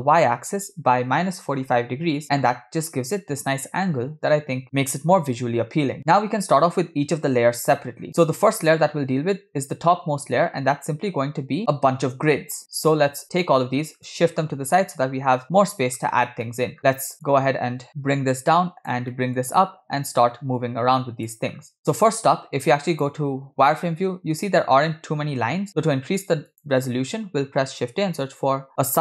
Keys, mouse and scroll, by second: 6.0 click, 8.1 middle click, 8.1 scroll down 4, 13.1-13.6 drag, 14.1-16.0 drag, 16.5 middle click, 16.9 scroll up 3, 17.3 click, 17.9 scroll down 1, 17.9-19.0 drag, 19.2 middle click, 20.2-21.3 drag, 21.8 middle click, 21.8 scroll up 2, 23.1 click, 25.8 shift+a.